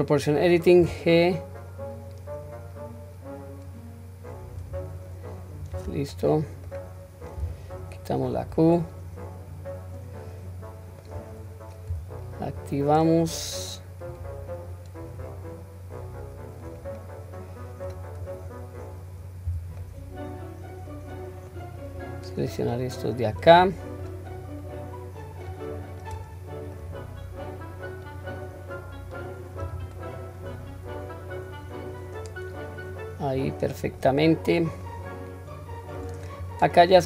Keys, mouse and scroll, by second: 6.1 middle click, 7.4 q, 8.0-11.1 middle drag, 12.6-14.1 drag, 15.2-16.7 drag, 17.0-17.9 middle drag, 18.3 click, 19.5 q, 19.8-21.5 middle drag, 22.0-23.3 drag, 23.6-24.0 middle drag, 24.7-29.6 drag, 30.0-33.3 middle drag, 33.7 middle click, 34.9-36.0 middle drag, 36.5 click.